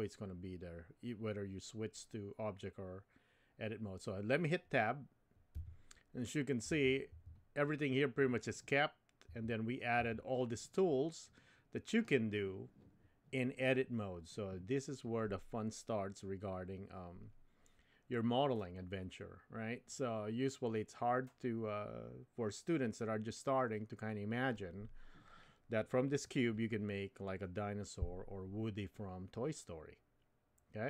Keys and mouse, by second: 5.5 Tab, 6.7 Tab, 7.1 Tab, 9.3 Tab, 10.0 Tab.